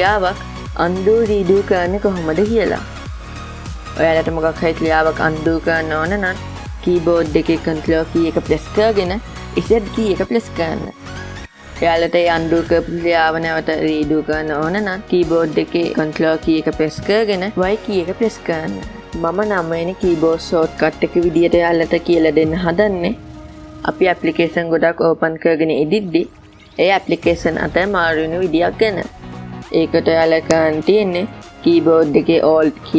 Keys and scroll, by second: 8.6 ctrl+z, 16.4 ctrl+y.